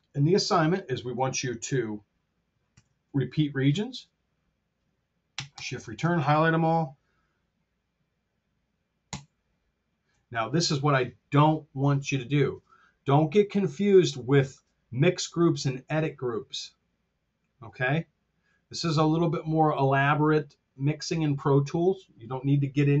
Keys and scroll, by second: 2.6 alt+r, 3.6 Home, 5.5 shift+Return, 8.9 super+g.